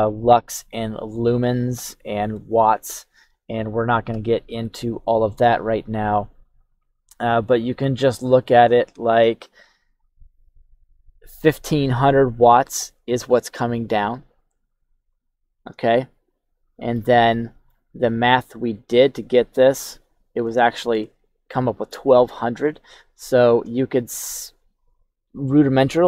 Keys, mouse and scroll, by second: 1.1-2.3 middle drag, 15.8-16.9 shift+middle drag, 17.1 middle click, 19.8-20.4 scroll down 2, 20.6 shift+middle click, 22.2 shift+middle click, 23.0-23.7 scroll up 2, 23.7 shift+middle click.